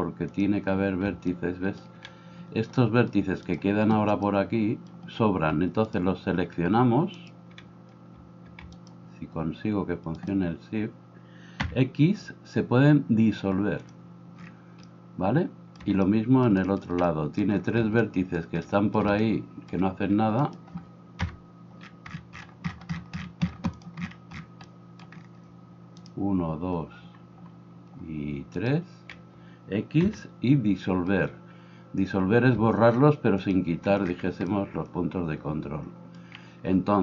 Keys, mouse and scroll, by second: 1.1 shift+middle click, 2.0-8.6 right drag, 7.2-10.8 drag, 7.2-8.6 middle drag, 10.8-12.5 right drag, 12.5 click, 13.9-23.9 drag, 20.4 right click, 23.9-37.0 middle drag.